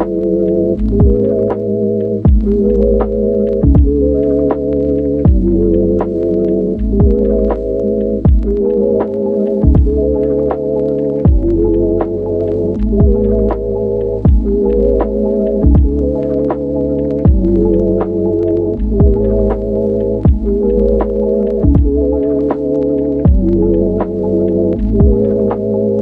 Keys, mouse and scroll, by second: 0.0 Return, 0.5 Return, 0.5 ctrl+z, 1.5 Return, 2.0 Return, 7.5 click, 10.9 ctrl+z, 11.6 ctrl+z, 13.6-14.0 ctrl+z, 16.3 ctrl+z, 19.2 click, 19.5 ctrl+z, 21.9 click, 22.6 click, 23.7 ctrl+z, 24.9 ctrl+z, 25.5 click.